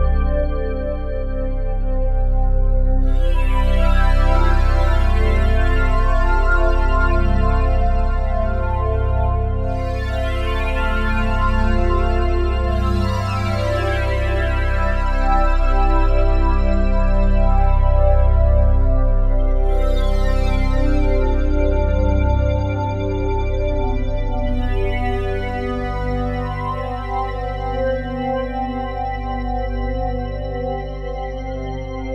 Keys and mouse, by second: 0.0 click, 1.0 alt+click, 2.1 typing, 2.9 ctrl+alt+click, 3.3 alt+shift+click, 3.8 ctrl+alt+click, 4.7 ctrl+alt+click, 5.1 typing, 5.8-7.9 alt+shift+drag, 7.9-8.3 typing, 11.8 click, 12.3 click, 13.5 g, 15.1 click, 15.8 ctrl+alt+click, 17.0 ctrl+alt+click, 17.6-19.1 alt+drag, 19.4 ctrl+alt+click, 21.5 alt+click, 21.5 typing, 22.2 alt+click, 23.3 click, 24.3-24.7 typing, 26.4 shift+click, 27.4 click, 28.2-28.6 typing, 29.8 click, 31.5 ctrl+s.